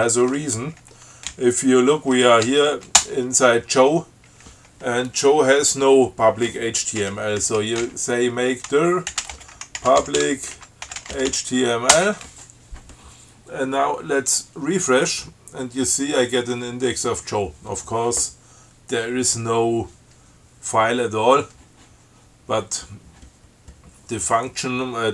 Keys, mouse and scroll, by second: 1.5 l, 2.7 s, 3.2 Return, 7.7-12.0 typing, 14.7 click.